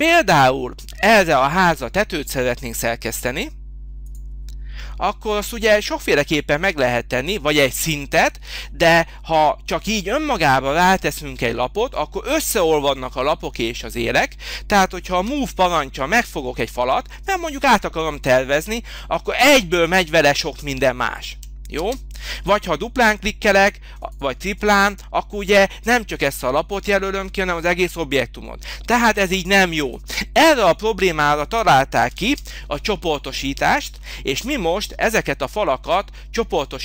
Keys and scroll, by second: 15.2 m, 21.1 Escape, 21.7 space, 32.1 ctrl+z, 33.9 h.